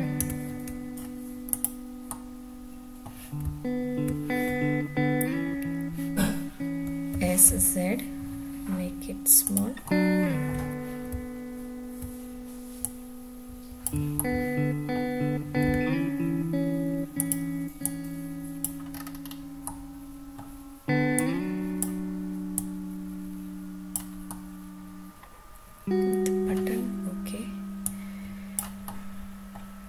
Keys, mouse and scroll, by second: 0.2 Tab, 1.0 scroll down 1, 1.5 click, 2.1-2.6 middle drag, 2.8 middle click, 3.4 `, 7.1 s, 7.4 z, 9.4 click, 9.8-10.4 middle drag, 11.1 `, 12.8-13.8 drag, 14.1-14.9 middle drag, 15.6 s, 17.1 click, 17.8-18.6 drag, 18.9-19.4 scroll up 5, 19.6-20.4 middle drag, 21.1 click, 22.5-23.9 drag, 24.3-26.4 middle drag, 27.8-28.5 drag, 28.8-29.5 middle drag.